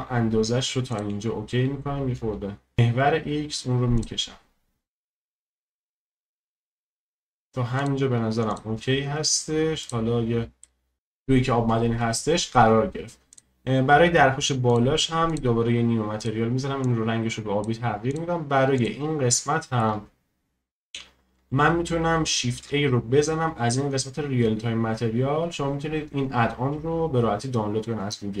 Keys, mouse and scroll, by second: 9.9-10.6 drag, 10.6-13.4 middle drag, 13.4 click, 15.4-16.8 drag, 18.1 click, 18.9 click, 19.3-23.6 shift+middle drag, 23.6-28.4 shift+middle drag.